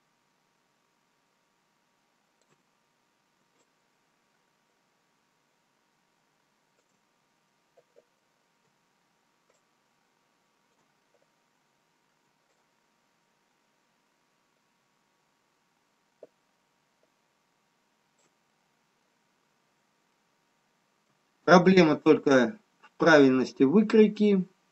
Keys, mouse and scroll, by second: 3.1 scroll up 2, 4.1 shift+click, 7.6 middle click, 7.6 scroll down 1, 10.2 shift+click, 11.5 middle click, 12.6 shift+click, 18.9 middle click, 20.1 scroll down 2, 21.2 middle click, 22.6 middle click.